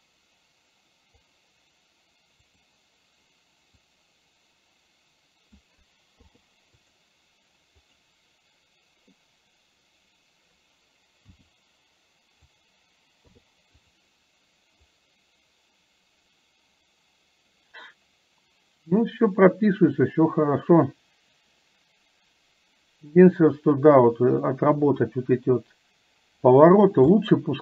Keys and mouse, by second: 2.5 click, 4.0-5.7 drag, 8.1 click, 15.2-26.7 drag, 27.2 middle click.